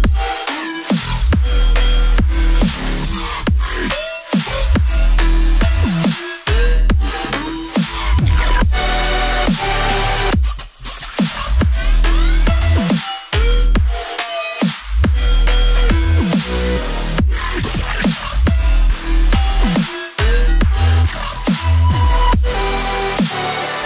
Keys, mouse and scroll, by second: 0.8 right click, 6.9 ctrl+click, 9.6 0, 9.9 ., 10.6 Tab, 11.2-12.7 typing, 12.8 Return.